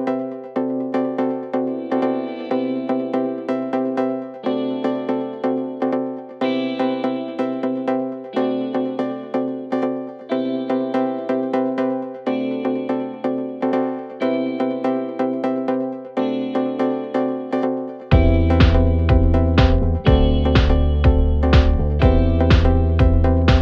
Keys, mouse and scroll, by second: 0.0 space, 0.2-1.1 click, 0.5 space, 2.0 click, 23.3-23.6 drag.